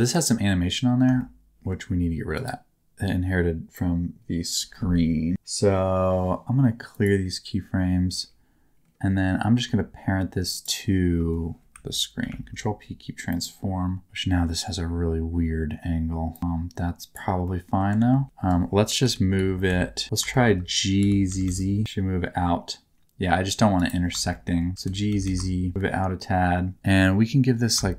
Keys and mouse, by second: 1.1 shift+middle click, 2.3-7.0 drag, 12.2 ctrl+p, 16.3 click, 17.4 middle click, 17.9 alt+z, 19.0 KP_1, 19.3 KP_3, 19.6 alt+z, 20.3 shift+middle click, 20.9 g, 21.2 z, 21.4 z, 23.7 shift+right click, 24.3 shift+middle click, 24.7 g, 25.1 z, 25.3 z, 27.7-27.9 shift+middle drag.